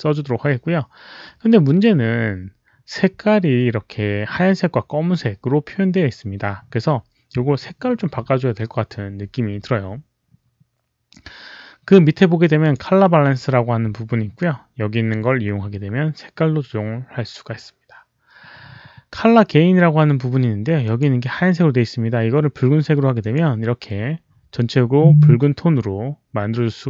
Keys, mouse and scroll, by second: 12.5 click, 20.7 click, 23.1 click, 26.6 click.